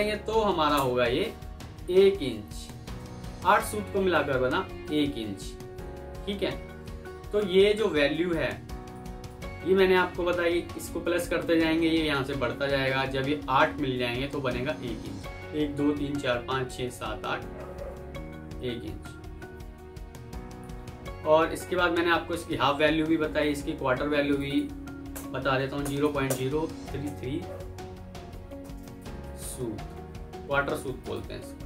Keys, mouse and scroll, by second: 0.6 Return, 1.6-2.8 typing, 5.5 F4, 8.5 F2, 9.8 Escape, 21.1 alt+scroll up 1, 24.3 double click, 25.0 Return, 25.7-26.9 typing, 28.7-29.1 typing.